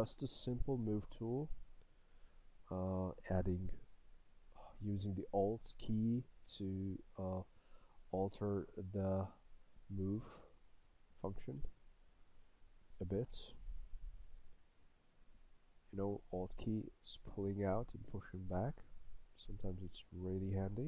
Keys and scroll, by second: 1.3 s, 11.6 s.